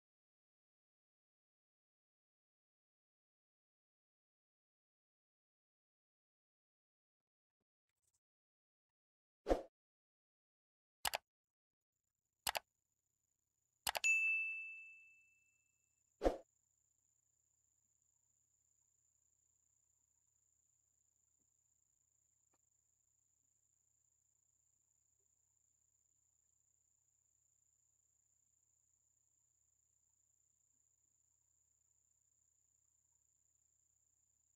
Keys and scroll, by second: 21.5 ctrl+c, 23.7 ctrl+c, 26.7 ctrl+a.